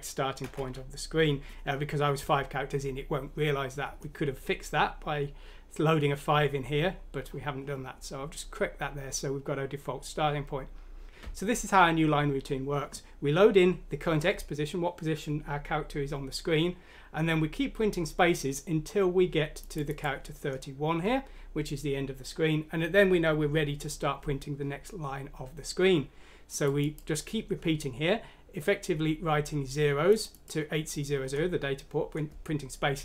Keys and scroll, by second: 0.0-0.7 typing.